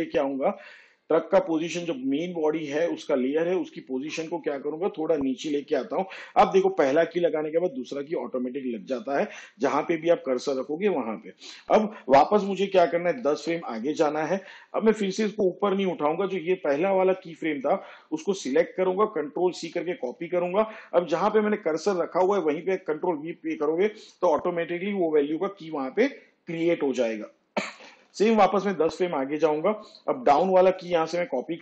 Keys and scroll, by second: 15.4 shift+Page_Down, 21.9 ctrl+c, 26.0 ctrl+v, 30.8 shift+Page_Down.